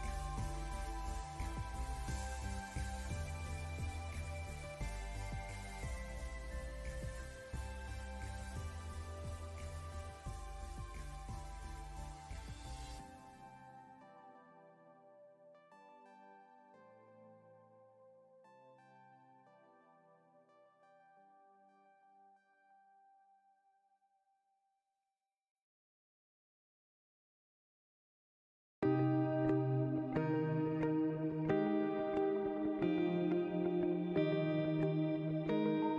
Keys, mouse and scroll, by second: 0.0 click, 0.8 scroll down 1, 1.2 click, 1.3 alt+scroll up 2, 1.6 click, 2.9 click, 3.4 click, 5.6-9.0 drag, 9.2 scroll up 1, 9.5 click, 10.3-12.1 drag, 14.1 click, 14.6 alt+scroll down 1, 14.9 click, 15.2 space, 15.4 scroll up 1, 15.5 click, 17.0 alt+scroll down 1, 17.1 alt+scroll up 1, 17.3 alt+scroll down 1, 17.4 alt+scroll up 1, 17.6 click, 19.0 alt+scroll up 1, 21.6-21.9 alt+scroll up 2, 21.6 click, 22.0 click, 23.8 click, 24.5 alt+scroll down 1, 24.6 alt+scroll up 1, 24.8 click, 25.8 click, 26.1 alt+scroll down 1, 26.3 alt+scroll up 1, 26.4 click, 26.9 alt+scroll down 1, 27.3 space, 27.5 click, 27.7 alt+scroll up 1, 28.0 alt+scroll down 1, 28.2 click, 28.7 click, 30.7 click, 31.0 space, 31.3 alt+scroll up 1, 31.5 click, 32.4 alt+scroll down 1, 32.7 click, 33.3 alt+scroll up 1, 33.4 click, 34.5 space, 34.7 click, 35.7 alt+scroll down 1, 35.8 click.